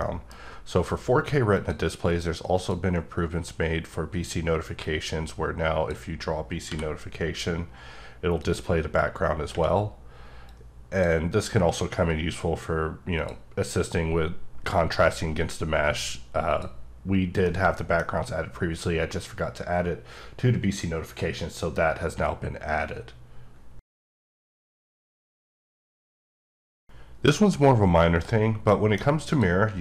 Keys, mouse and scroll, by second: 0.0 middle click, 0.4-1.5 scroll up 1, 1.5 click, 2.5 click, 4.8 click, 6.6 b, 7.4-8.4 scroll up 4, 8.4 click, 10.4-11.9 drag, 11.9 b, 12.5-13.1 scroll up 1, 13.1 click, 16.4 click, 17.4-17.7 scroll up 1, 17.7 middle click, 29.3 click.